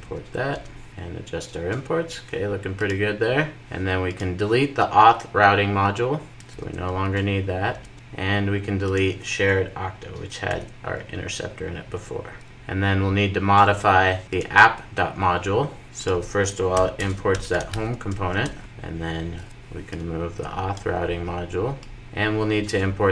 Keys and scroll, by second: 0.0 alt+Return, 0.9 super+s, 6.6 Delete, 12.0 Delete, 18.4 Return, 18.6 super+s, 22.0 super+s.